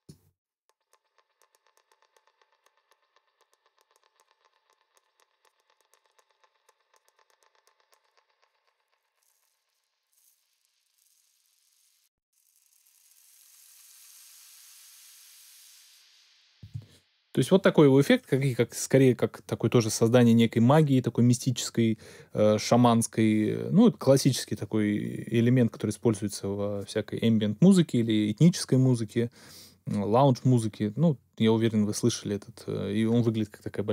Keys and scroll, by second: 16.6 space.